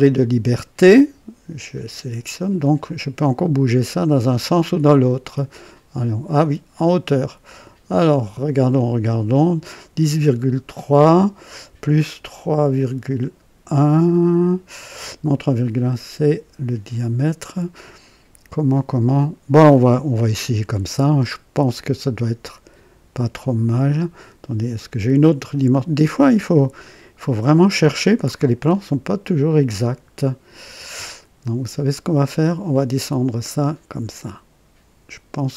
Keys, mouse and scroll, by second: 1.5 click, 5.2-8.4 drag, 20.3 click, 32.6-35.5 drag.